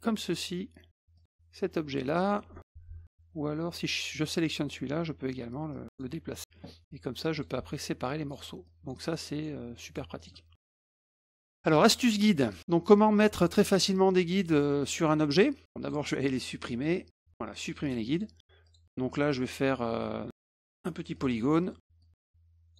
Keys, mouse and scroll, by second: 1.2 click, 1.9 click, 4.2 click, 5.7 click, 7.3 click, 8.1 drag, 8.6 drag, 9.2 drag, 9.8 drag, 10.2 click, 11.0 middle click, 11.4 middle drag, 11.9-12.2 middle drag, 12.4 middle click, 13.7 middle click, 14.5 click, 15.8 click, 17.8 click, 18.1 click, 18.6 click, 20.0 click, 20.4 click, 21.1 click, 21.5 middle click, 22.0 click.